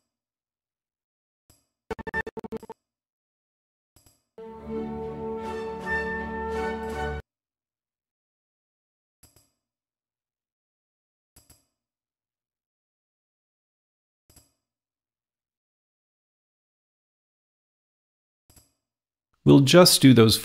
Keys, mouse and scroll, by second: 1.6-3.9 drag, 4.0-6.0 drag, 7.0-9.0 drag, 9.4-13.4 drag, 14.5 click, 14.9-16.8 typing, 15.1 click, 18.5 Return, 18.5 click, 19.7 click.